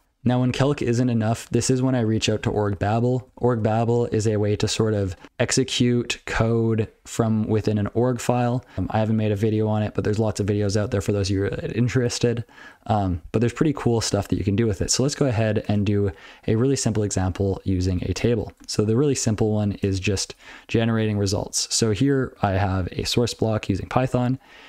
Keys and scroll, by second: 2.4 ctrl+alt+b, 2.7 ctrl+alt+b, 3.1 ctrl+alt+f, 3.3 ctrl+alt+f, 4.6 ctrl+alt+f, 13.0 ctrl+n, 13.4 ctrl+n, 13.7 ctrl+p, 14.1 ctrl+n, 14.3 ctrl+n, 14.9 ctrl+p, 15.1 ctrl+p, 15.3 ctrl+a, 15.8 ctrl+n, 16.0 ctrl+p, 17.5 ctrl+n, 18.2 Tab, 18.7 ctrl+n, 19.0 ctrl+n, 19.2-19.5 ctrl+n, 19.7 ctrl+p, 19.9 ctrl+space, 19.9 ctrl+n, 20.2 ctrl+space, 20.3 ctrl+w, 20.5 ctrl+p, 20.7 ctrl+p, 20.9 ctrl+p, 21.2 ctrl+f, 21.4 ctrl+f, 21.8 ctrl+p, 22.4 ctrl+p, 22.6 ctrl+n, 23.4 ctrl+e, 23.7 ctrl+n, 24.4 ctrl+e, 24.6 ctrl+n.